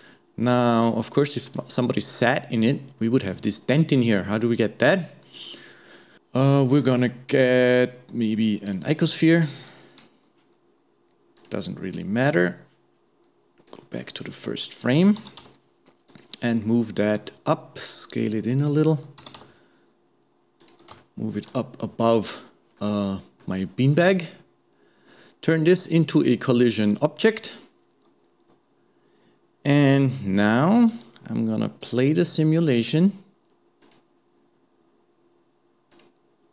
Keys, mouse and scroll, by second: 3.7-6.1 middle drag, 6.8 shift+a, 11.4 click, 13.7 click, 15.2 g, 16.7-17.2 scroll down 1, 17.2 s, 21.0-25.8 shift+middle drag, 25.8 click, 31.8 click, 34.0-36.5 drag.